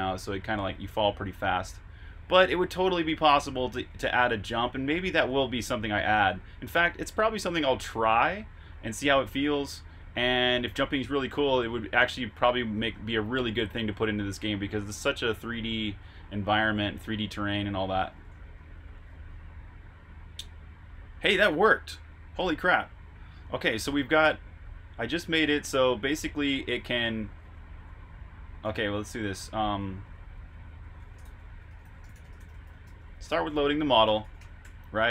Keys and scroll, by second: 0.0-2.3 typing, 5.3-7.0 typing, 8.4-10.0 typing, 12.1-13.4 typing, 15.7-16.7 typing, 18.3-19.1 typing, 23.6-24.4 typing, 28.6-32.4 typing, 33.6-34.3 typing.